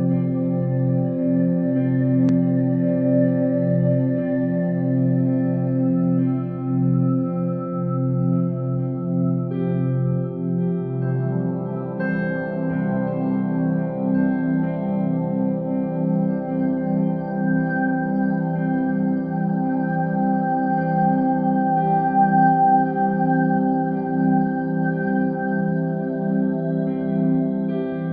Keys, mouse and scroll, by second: 0.3 click, 0.7 g, 1.6 y, 2.4 click, 2.6 g, 4.1 click, 7.0 click, 10.3 ctrl+c, 12.3 click, 13.7 click, 14.8 ctrl+v, 16.2 click, 22.9 click.